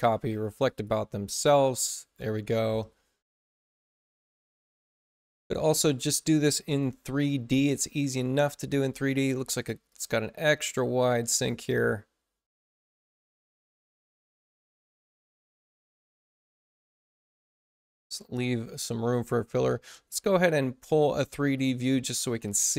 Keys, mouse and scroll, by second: 0.6 click, 4.9 click, 6.6 click, 7.6 click, 8.7 click, 9.2 click, 9.8-11.4 drag, 11.9-12.7 typing, 12.9 click, 14.0 click, 14.6 click, 16.0 click, 17.4 click.